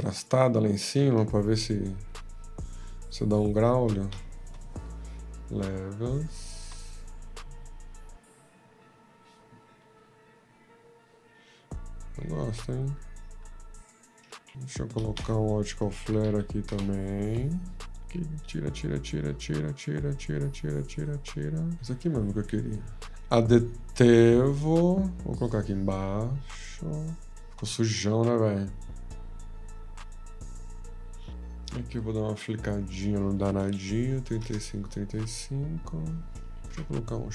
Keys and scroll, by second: 14.5 ctrl+y, 15.7-16.9 typing, 27.0-27.8 typing.